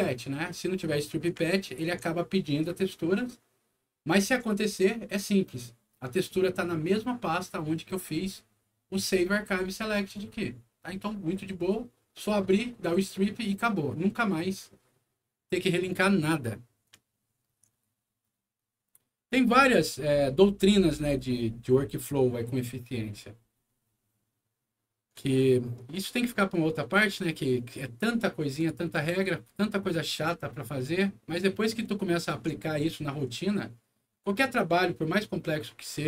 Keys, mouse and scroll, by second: 1.4 alt+middle click, 15.9 middle click, 17.0 alt+middle click, 17.9-18.6 alt+scroll up 3, 25.3-26.9 alt+middle drag, 27.5 alt+middle click, 28.5 alt+click, 29.2 alt+scroll down 1, 30.7 middle click, 32.0 alt+middle click.